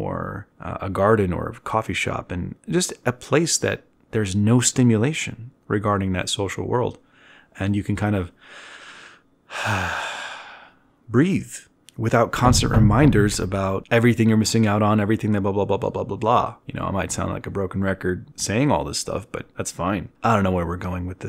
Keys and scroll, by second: 3.0 z, 3.9 z, 4.3 ctrl+alt+1, 4.9 b.